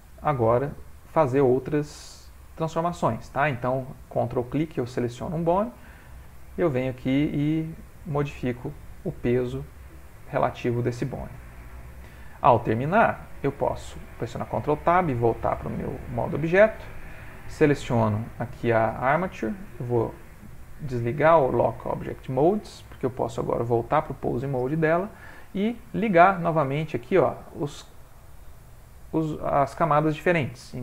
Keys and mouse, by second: 1.2 middle click, 2.1 middle click, 2.2 shift+middle click, 2.6 middle click, 5.0 ctrl+click, 5.1 middle click, 6.4 shift+middle click, 7.5 click, 9.0 middle click, 9.1 ctrl+middle click, 9.6 ctrl+middle click, 9.7 middle click, 10.2 ctrl+middle click, 11.0 ctrl+middle click, 11.7 middle click, 12.3 middle click, 12.5 ctrl+middle click, 13.0 middle click, 14.2 ctrl+Tab, 16.9 click, 19.3 click, 22.5 click, 22.8 ctrl+Tab, 26.6 click.